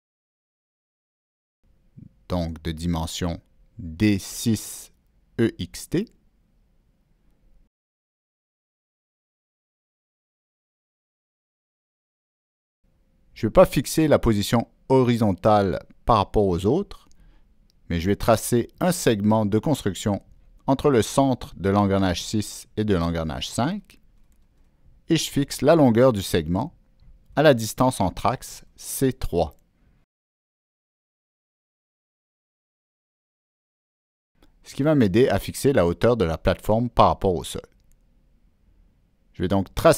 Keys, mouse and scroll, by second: 1.9 click, 3.8 click, 4.6 click, 6.7-7.2 drag, 8.5 click, 11.4 click, 12.4-13.0 drag, 15.7 click, 17.1 click, 19.0 click, 20.7 click, 23.3 click, 25.9-27.0 drag, 27.9 right drag, 28.1 click, 29.4 click, 30.8 right click, 31.8 click, 31.9 right click, 33.5 click, 34.2 Down, 34.7 Return, 36.0 click, 36.2 Down, 36.2 Return, 38.2 Down, 38.2 Return, 38.2 Escape, 38.2 click, 39.1-39.9 drag.